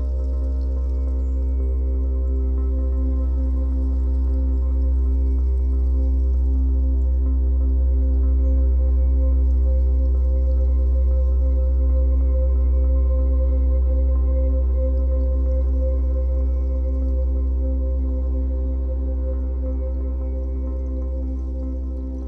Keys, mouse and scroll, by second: 6.4 scroll down 2, 6.6-8.6 middle drag, 8.6-16.1 drag, 16.1-17.2 middle drag, 17.2-20.9 drag, 20.9-22.2 middle drag, 21.6 scroll down 2.